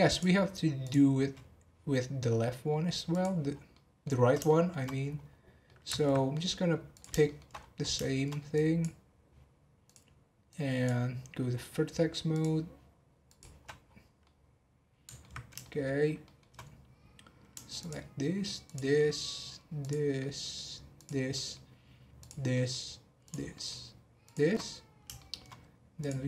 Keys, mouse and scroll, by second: 0.1 click, 0.8 click, 3.1 click, 3.5 scroll down 3, 3.7 middle click, 4.2 scroll down 1, 4.4 shift+middle click, 5.0-5.6 scroll down 3, 5.6 middle click, 6.1 scroll up 3, 6.9 click, 7.2 shift+middle click, 7.5 scroll up 2, 8.0 shift+middle click, 8.5 click, 9.8 click, 12.3-13.6 drag, 13.6-14.0 scroll down 10, 14.2-15.2 middle drag, 15.2-15.6 alt+scroll down 1, 15.6-16.6 shift+middle drag, 16.6-17.8 scroll up 4, 17.8 shift+click, 18.6 shift+click, 18.9 shift+middle click, 19.8 shift+click, 20.1 shift+middle click, 20.9 shift+click, 21.3 shift+middle click, 22.1 shift+click, 22.5 shift+middle click, 23.2 shift+click, 23.5 shift+middle click, 24.2 shift+click, 24.6 scroll down 2, 25.1 shift+middle click, 26.0 click.